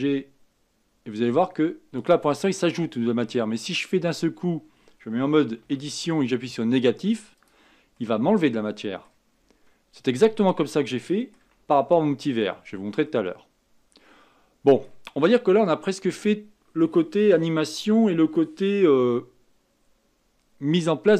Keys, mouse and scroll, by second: 5.6 Tab, 7.3 click, 7.9-9.3 middle drag, 9.3-10.2 scroll up 5, 10.2-12.7 middle drag, 12.7-13.0 scroll down 2, 13.0-15.3 middle drag, 15.3-15.7 scroll up 2, 15.7-18.6 scroll down 2, 19.6-21.1 scroll down 3.